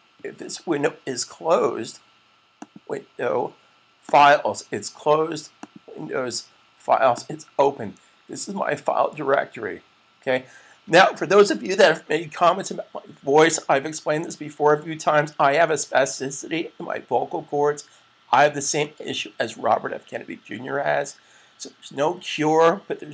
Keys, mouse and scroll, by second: 2.4 click.